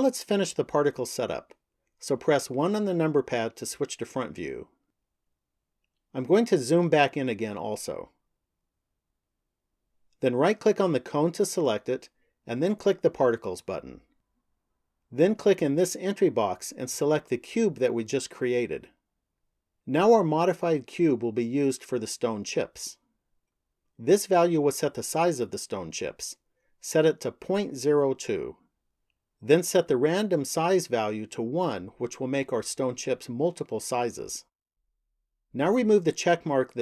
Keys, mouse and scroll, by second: 2.3 KP_1, 5.0-5.7 scroll up 3, 6.2-8.5 scroll up 4, 10.3 right click, 12.8 click, 15.8 click, 26.1 click, 31.3 click.